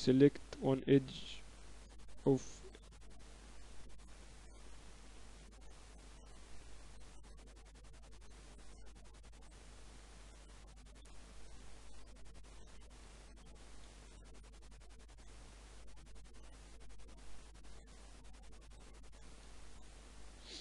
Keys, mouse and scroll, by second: 0.0-1.5 typing, 4.1-6.1 middle drag, 5.7-7.5 drag, 5.7 right click, 11.0-14.2 middle drag, 14.9-16.7 drag, 19.4 middle click, 19.7 ctrl+s, 20.4 middle click.